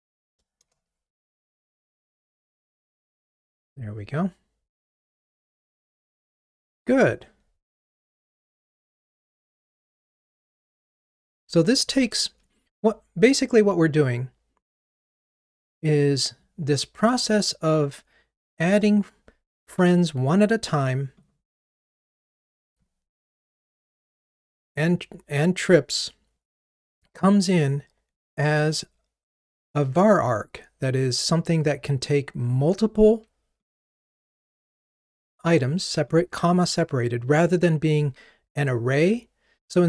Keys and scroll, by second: 4.9 super+9, 15.4 super+b, 33.7 super+b.